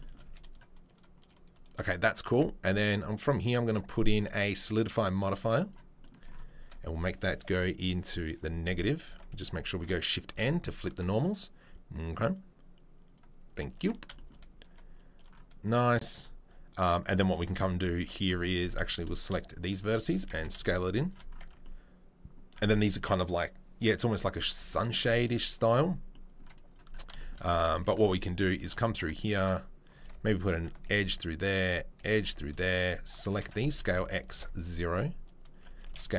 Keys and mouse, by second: 0.2 a, 2.3 Tab, 3.6 right click, 3.8-4.1 middle drag, 5.7-12.4 right drag, 9.4 a, 10.3 shift+n, 13.1-19.5 middle drag, 13.8 Tab, 18.7 1, 19.5 shift+right click, 19.6-27.1 shift+middle drag, 20.0 s, 21.4 Tab, 27.1 shift+click, 27.3 middle click, 28.0 ctrl+r, 28.1 middle click, 28.7 shift+click, 28.9 middle click, 30.0 ctrl+r, 30.1 middle click, 30.9-35.4 middle drag, 31.9 ctrl+r, 33.7 s, 35.4 click, 35.5-36.1 middle drag.